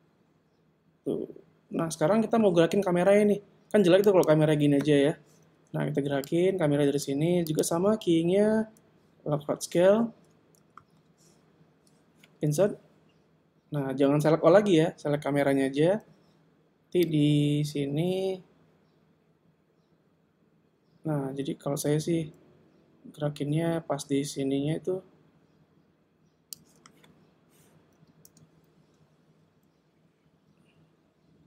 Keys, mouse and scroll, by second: 1.9 Escape, 4.1 right click, 6.3 click, 7.6 click, 12.6 i, 17.1 click, 28.3 shift+f.